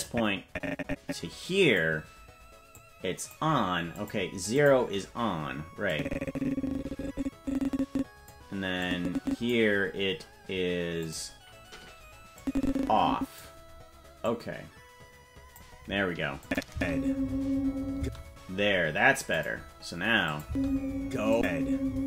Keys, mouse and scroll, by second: 0.0-1.8 drag, 2.7 click, 3.9 click, 4.5 click, 5.9-8.3 drag, 8.8 click, 11.0 click, 12.3-13.4 drag, 14.2-15.5 drag, 16.4 click, 16.7 space, 17.9 space, 19.3 click, 20.4 space, 21.3 click.